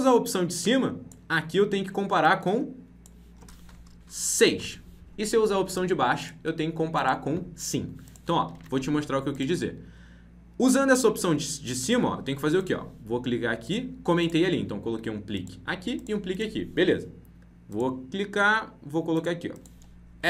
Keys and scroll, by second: 8.5 ctrl+z.